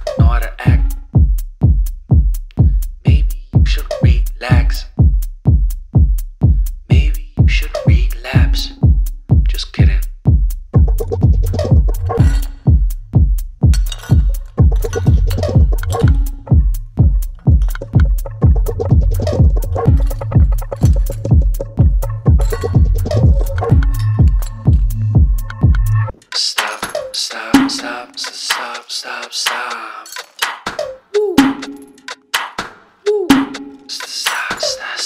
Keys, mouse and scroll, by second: 1.4 click, 2.2 scroll up 2, 2.6 ctrl+space, 2.8-3.4 ctrl+click, 3.0 ctrl+space, 3.5-4.0 click, 3.8 space, 4.1-4.6 ctrl+click, 6.4 ctrl+t, 7.4 Up, 8.8 click, 13.9-17.6 typing, 18.9-21.3 drag, 24.1 click, 28.0-28.5 typing, 29.8-30.5 typing, 33.6-34.1 drag, 33.6 typing.